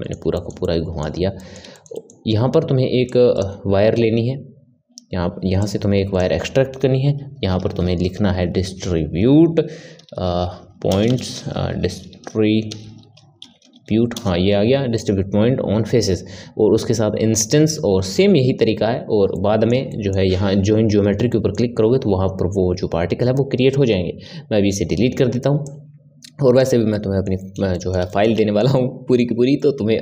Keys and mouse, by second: 3.0 click, 5.6 click, 11.0 BackSpace, 19.3-24.2 middle drag, 24.2 Delete, 25.6-26.9 drag, 26.9-30.0 middle drag.